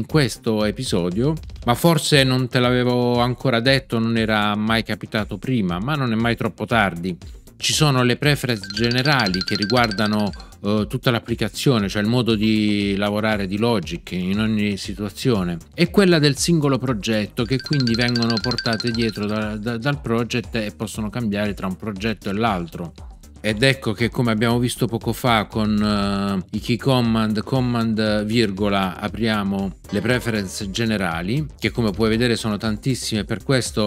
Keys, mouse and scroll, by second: 29.8 super+,.